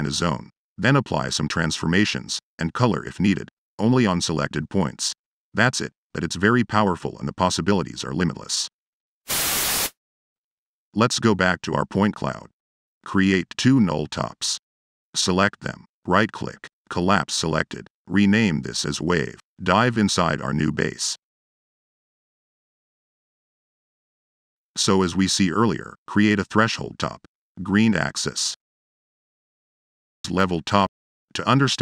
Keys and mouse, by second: 10.8-11.4 right drag, 11.7-12.0 drag, 12.3 right drag, 12.6-15.3 typing, 12.6 click, 13.6 click, 14.0-14.4 right drag, 14.4 click, 15.6 right click, 16.0 right click, 16.5 click, 17.3 click, 20.7 click, 21.1 right click, 21.7 Delete, 22.3 right click, 22.7 click, 23.6 right drag, 24.0-24.4 drag, 24.7 click, 24.8 Tab, 24.9-25.7 typing, 25.6 drag, 26.2-26.5 drag, 27.2 click, 28.0 click, 29.2 click, 30.0 click, 30.5 l, 30.8 e, 31.4 click, 31.7 drag.